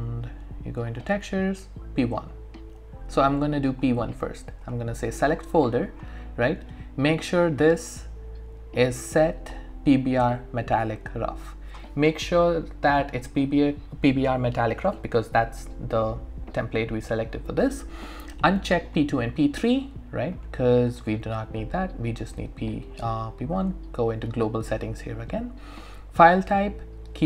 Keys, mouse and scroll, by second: 0.8 click, 4.6 click, 7.8 click, 9.6 scroll up 1, 9.8-10.2 scroll down 1, 10.2 click, 18.4 click, 23.5 click.